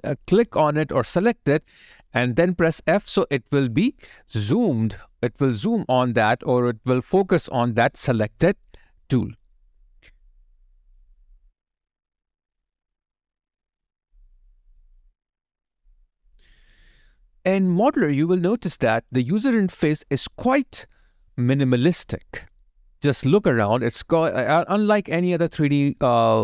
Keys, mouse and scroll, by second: 7.4 scroll down 1, 10.9 ,, 14.2 ,, 19.2 alt+click.